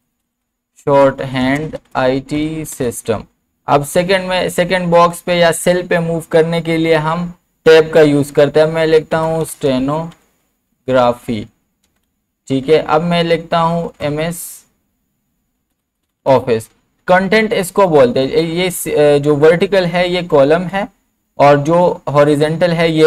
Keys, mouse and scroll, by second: 0.0-3.4 typing, 3.7 Tab, 8.9-12.4 typing, 12.5 Tab, 13.6-16.8 typing, 20.7 click.